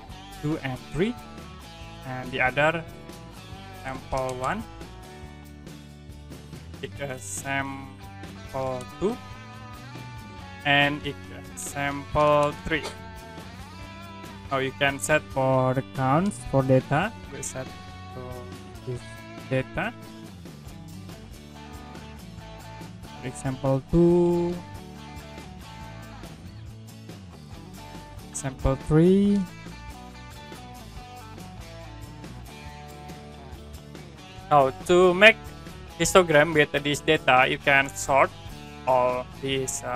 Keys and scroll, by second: 0.2 2, 1.0 3, 3.2-4.8 typing, 5.7 Right, 6.7-9.4 typing, 9.8 Right, 11.0-12.4 typing, 14.1 3, 17.2 2, 17.4 5, 17.8 3, 19.8 2, 20.5 2, 21.7 5, 21.9 6, 22.2 2, 24.0 5, 24.3 2, 24.5 3, 25.5 5, 27.0 2, 27.3 3, 27.6 4, 29.4-31.2 typing, 33.2 2, 33.5 3.